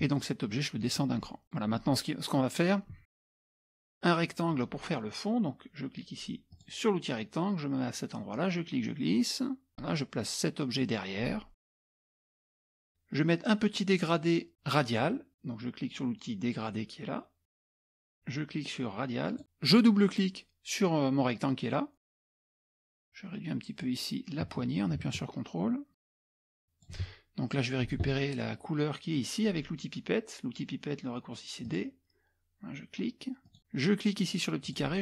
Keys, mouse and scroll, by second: 0.9 click, 1.4 click, 3.1 ctrl+z, 3.4 click, 6.5 click, 8.4-10.0 drag, 11.7 click, 17.7 click, 19.3 click, 22.0 click, 23.8-27.0 drag, 31.7 click, 33.5 click, 34.6 click.